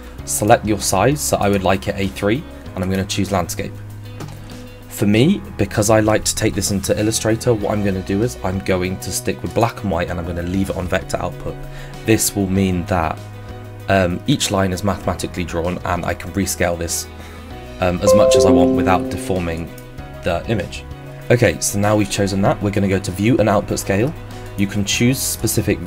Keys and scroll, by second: 21.2 Escape.